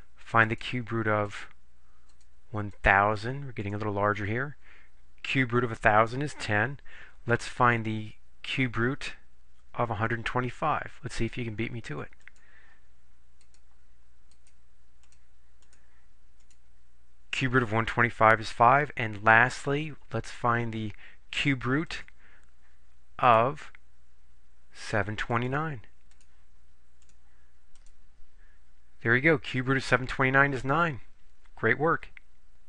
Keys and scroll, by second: 0.6 1, 1.4 0, 2.2 0, 2.8 0, 3.7 Return, 13.5 4, 14.4 1, 15.1 2, 15.7 5, 16.5 Return, 23.3 4, 25.4 7, 26.2 2, 27.0 9, 27.8 Return.